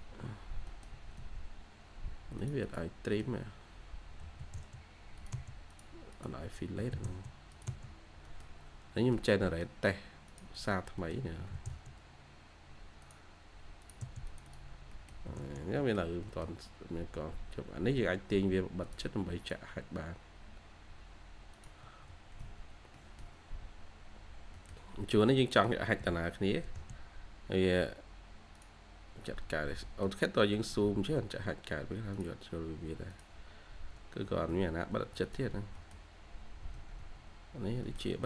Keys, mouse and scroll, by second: 0.6 middle click, 0.8 Escape, 1.1 Escape, 1.3 scroll down 1, 1.4 scroll up 1, 2.5 double click, 3.0 middle click, 6.0 double click, 6.7 typing, 7.8-8.1 scroll down 1, 7.9-8.6 typing, 8.6 scroll down 1, 8.8 scroll up 1, 8.9 middle click, 9.8-10.4 scroll up 1, 10.4 double click, 10.9 middle click, 11.2-12.5 typing, 11.6-12.0 scroll up 1, 14.3 double click, 14.6 scroll down 1, 14.8 middle click, 15.2 typing, 15.4 scroll, 15.5 scroll down 1, 15.7 middle click, 16.9-17.4 scroll up 1, 21.7 Escape, 21.9-22.3 scroll down 1, 22.5-23.5 scroll down 2, 22.8 middle click, 23.5-24.2 scroll up 1, 24.4 middle click, 25.6-25.9 scroll down 1, 25.9 scroll, 26.0 scroll down 1, 26.2-26.6 scroll, 27.3 scroll up 1, 27.6 typing, 29.5 scroll down 1, 29.7 middle click, 30.2-30.8 scroll down 1, 30.8-31.8 scroll up 1, 33.5-34.1 scroll up 1, 34.1 Escape, 34.3 scroll up 2, 34.8 Escape, 35.4 scroll down 1, 35.6 middle click, 36.6 Escape, 36.9 Escape, 37.4 scroll up 1, 37.8 middle click.